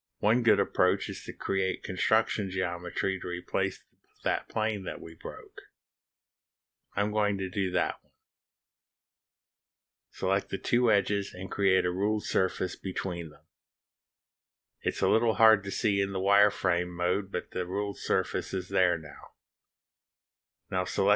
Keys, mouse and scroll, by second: 4.7-9.7 drag, 9.7-11.1 scroll down 2, 11.1-11.4 scroll down 1, 12.3 click, 13.2 ctrl+click, 15.5 click, 17.7-19.0 drag.